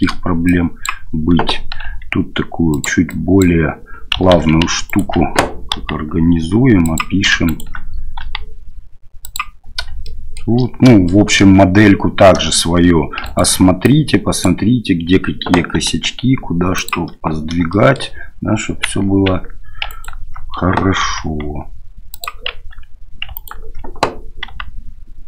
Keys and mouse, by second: 0.6 click, 1.9 g, 3.2 click, 4.4 ctrl+z, 4.9 alt+right click, 5.7 g, 7.4 alt+right click, 8.2 g, 10.2 shift+click, 11.2 shift+click, 13.2 alt+right click, 13.8 click, 15.7 g, 17.8 shift+middle click, 19.9 alt+right click, 21.1 g, 23.3 alt+right click, 24.4 g.